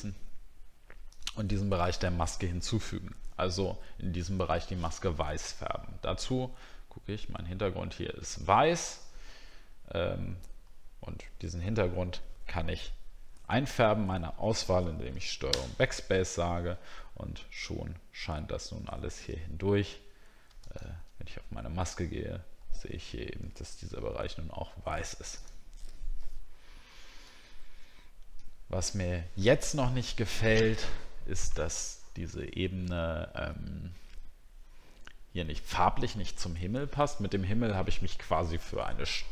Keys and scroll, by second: 15.5 ctrl+BackSpace, 23.8 ctrl+d, 27.4-28.0 alt+scroll down 2.